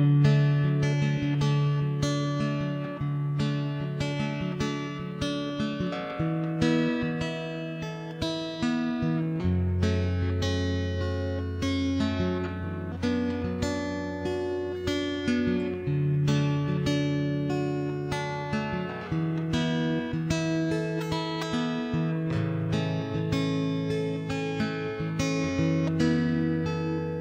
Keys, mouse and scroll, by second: 0.2 right click, 0.5 middle click, 0.8 right click, 1.2 middle click, 1.2 right click, 1.5 right click, 1.6 middle click, 2.2 right click, 2.5-3.6 middle drag, 2.8 right click, 3.7 right click, 3.8 middle click, 4.4 Tab, 4.6 Tab, 4.9 ctrl+KP_3, 5.5 d, 5.7 click, 7.5 middle click, 8.9 Tab, 9.3 d, 9.5 Tab, 9.5 right click, 10.0 l, 10.3 click, 11.0 middle click, 11.6 Tab, 11.8 middle click, 11.9 click, 12.0 right click, 12.1 Tab, 12.2 middle click, 13.0 middle click, 13.7-14.9 middle drag, 14.9 ctrl+l, 15.1 middle click, 15.1 w, 15.5 ctrl+Tab, 15.7-16.9 right drag, 16.1 middle click, 16.7 middle click, 16.9 Tab, 17.3 middle click, 17.3 shift+h, 17.4 Tab, 17.7 right click, 19.1 w, 19.6 ctrl+Tab, 20.7-21.7 middle drag, 22.4 c, 24.5 middle click, 24.8 x, 26.0 middle click, 26.4-27.2 right drag, 26.8 click.